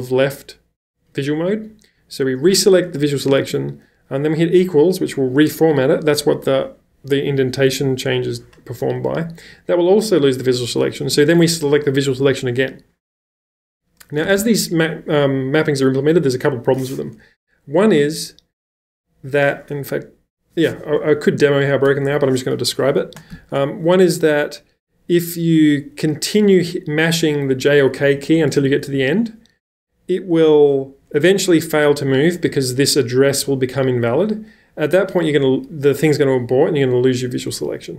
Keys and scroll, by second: 1.1 l, 3.3 typing, 11.1 l, 14.0-14.9 typing, 21.9 Escape, 22.0 Escape, 27.3-29.0 typing.